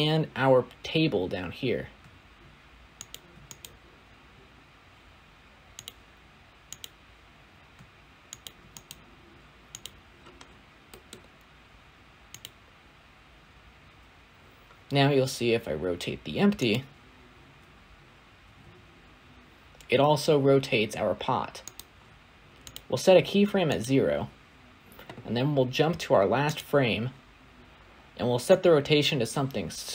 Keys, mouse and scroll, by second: 3.0 shift+click, 5.7-8.4 right drag, 8.4 shift+click, 9.7-10.3 right drag, 10.3-10.7 scroll down 2, 10.7-12.7 middle drag, 12.7 click, 14.3 scroll down 6, 15.2-15.8 scroll down 2, 16.0-16.5 scroll down 2, 16.5 click, 17.0-17.4 scroll up 7, 18.3 r, 21.9 scroll down 7, 22.2-23.0 drag.